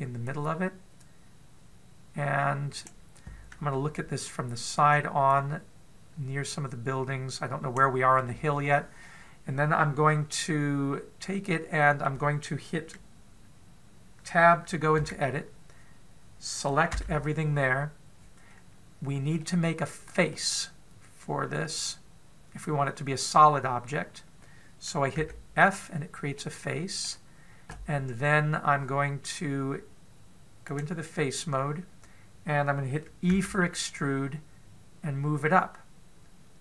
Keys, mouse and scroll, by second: 1.1 click, 4.6 KP_1, 6.2 click, 8.9-9.3 scroll up 1, 11.1 middle click, 11.1 scroll up 1, 15.9 Tab, 17.7 a, 20.2 middle click, 26.0 f, 27.1 middle click, 31.5 click, 34.2 e.